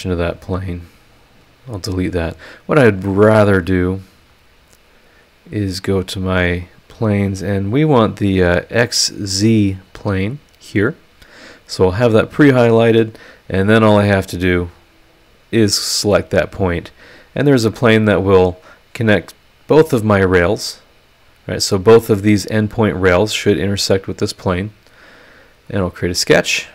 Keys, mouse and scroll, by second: 0.3 right click, 1.2 click, 1.6 click, 2.4 click, 4.0 click, 5.1 click, 5.9 click, 10.4 click, 12.3 click, 14.6 click, 16.6 click, 20.8-21.1 scroll down 1, 21.2 scroll up 2, 24.1 click, 25.6 click, 26.6 scroll down 1.